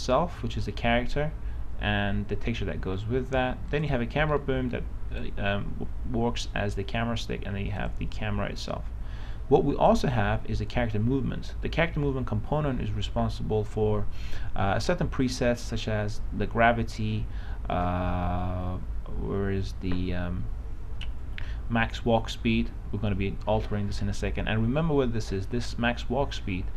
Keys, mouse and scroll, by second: 4.6 right click, 8.1-16.3 drag.